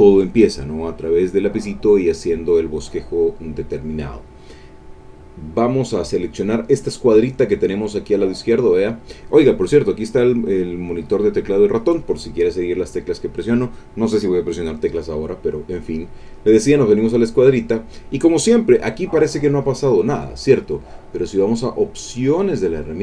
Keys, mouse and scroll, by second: 16.8 click, 22.3 click.